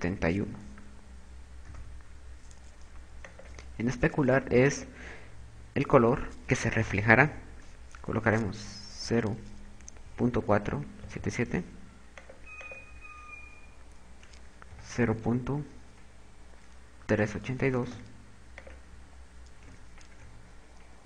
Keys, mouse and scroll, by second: 3.6 click.